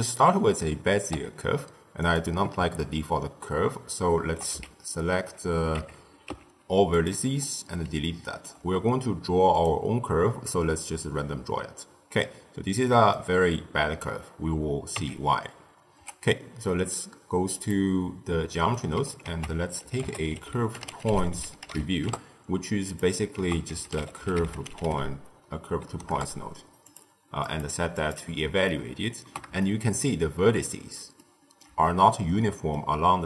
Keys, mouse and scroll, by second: 1.0 t, 2.0 click, 2.8-5.7 ctrl+middle drag, 5.7 Tab, 7.0 x, 8.1-9.5 ctrl+middle drag, 9.5-12.0 drag, 12.0-14.9 middle drag, 14.9 Tab, 15.9 t, 17.6-22.0 drag, 22.0 ctrl+a, 26.0 ctrl+a, 28.0 click, 28.6-33.2 ctrl+middle drag.